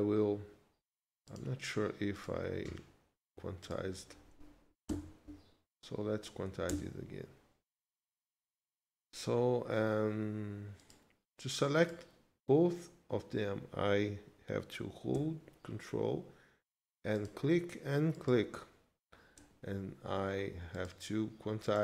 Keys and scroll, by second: 4.9 q, 6.7 Return.